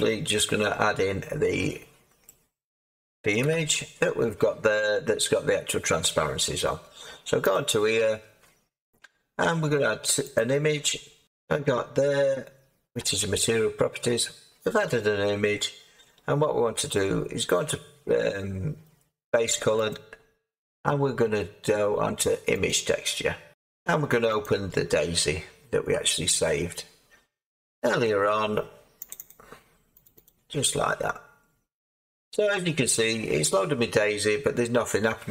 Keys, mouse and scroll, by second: 3.4 7, 7.5 click, 15.8-17.5 scroll, 19.8 click, 23.5-24.4 scroll, 24.4 click, 27.5-29.1 middle drag, 29.1-35.3 drag.